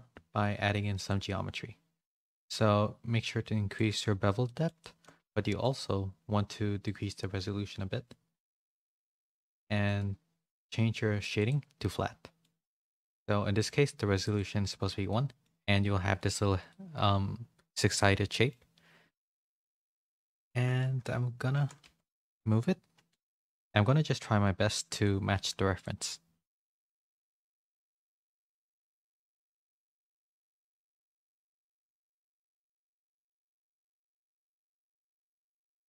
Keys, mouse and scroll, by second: 0.9 click, 2.4-3.7 shift+drag, 4.0 Tab, 4.4 shift+middle click, 4.8 shift+middle click, 5.4 middle click, 5.5-6.8 middle drag, 6.8-9.4 drag, 11.9 middle click, 14.3 click, 15.1 middle click, 15.7 middle click, 16.0 middle click, 16.6-18.4 middle drag, 20.1 KP_7, 20.5 Tab, 21.5 g, 23.1 z, 23.5 g, 25.2 g, 27.6 click, 28.8 KP_7, 30.0 g, 31.9 g, 33.4 click.